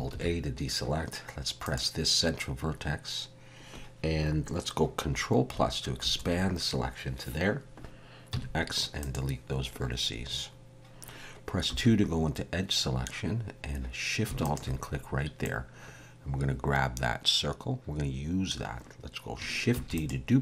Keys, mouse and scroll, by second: 0.1 alt+a, 1.6 click, 6.0 ctrl+KP_Add, 8.3 x, 11.7 2, 14.4 alt+shift+click, 15.4 middle click, 19.7 shift+d.